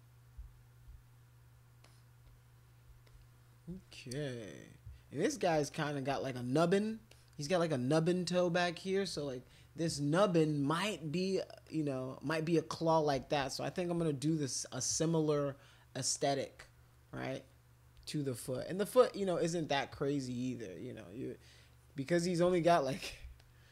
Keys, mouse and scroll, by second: 1.8 alt+click, 2.2 click, 3.1 click, 3.7 alt+click, 5.7 alt+click, 6.1 click, 7.1 alt+click, 11.7 click, 13.3 alt+click, 13.8 alt+click, 14.2 alt+click, 14.8 alt+click, 16.1 click, 17.3 alt+click, 21.3 click, 21.7 click, 23.4 alt+click.